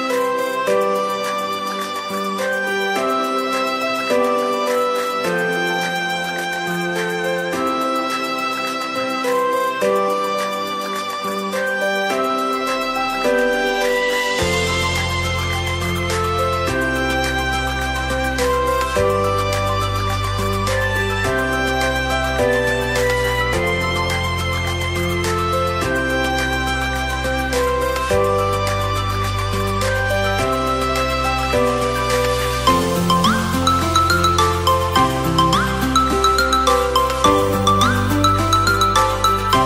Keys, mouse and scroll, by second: 1.3 Tab, 1.8-3.0 middle drag, 3.0 KP_1, 5.0 shift+middle click, 5.5 scroll up 2, 6.0 scroll up 1, 6.1-7.8 shift+middle drag, 7.8 shift+d, 8.6 click, 9.8 r, 14.7 click, 16.6 r, 18.5-19.7 middle drag, 19.7 click, 21.2 s, 22.8 shift+d, 23.6 click, 29.0 Tab, 29.6 click, 30.5 KP_7, 31.9 click, 32.8 click, 34.0-36.8 drag, 36.8 shift+d, 38.2-38.5 drag.